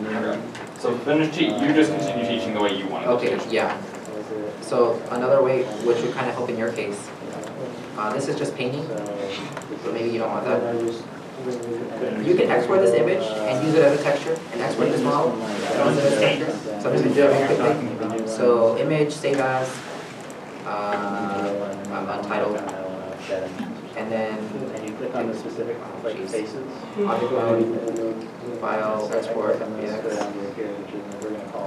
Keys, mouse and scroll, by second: 1.9 middle click, 2.4 scroll down 1, 3.2 middle click, 4.3 Tab, 5.2 shift+middle click, 5.2 Tab, 6.4 Tab, 10.7 middle click, 10.8 Tab, 11.0 Tab, 12.0 middle click, 23.7 middle click, 23.8 Tab.